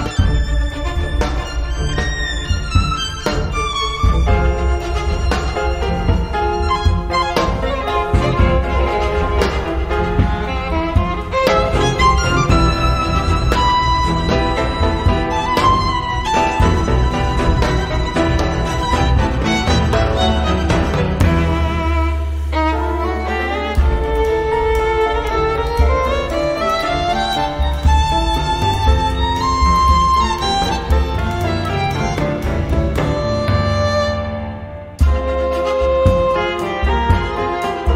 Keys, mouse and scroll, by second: 0.5 click, 1.9 click, 3.2 click, 8.0 click, 9.8 click, 10.3 click, 11.2 click, 12.5-13.7 drag, 14.2 click, 15.3 3, 16.0 click, 16.9-18.0 drag, 18.2-18.5 scroll down 1, 18.7 click, 20.2 click, 21.2-24.0 drag, 24.5 0, 25.1 scroll down 2, 25.6 scroll up 2, 26.4 click, 28.8 click, 31.6 click, 32.3 click, 33.7 click, 34.6 2, 35.2 0, 35.9 click, 37.0 8, 37.3 0.